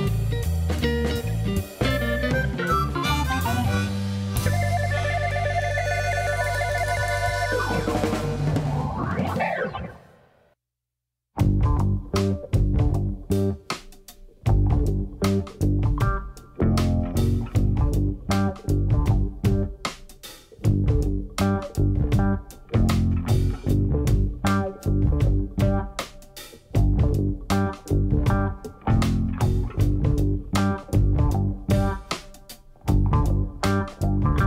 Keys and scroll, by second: 1.1 g, 3.1 y, 7.0 a, 9.3 Tab, 10.2 ctrl+2, 11.3 space, 14.0 space, 32.0 space.